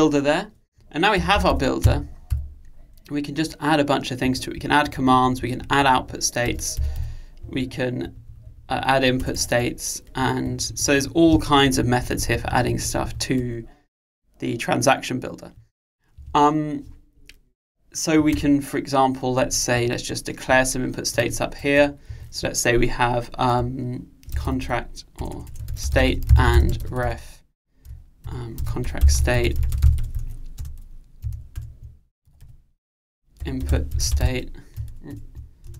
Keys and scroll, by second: 16.2 Escape, 31.7 alt+Return.